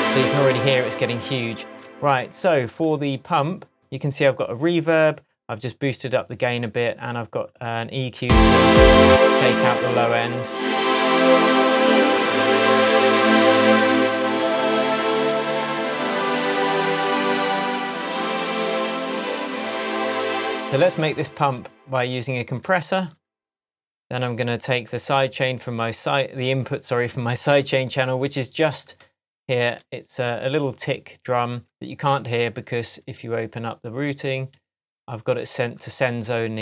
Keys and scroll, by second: 1.3 Tab, 8.2 space, 10.4 space, 20.2 space, 27.4 Tab, 32.0 shift+Tab.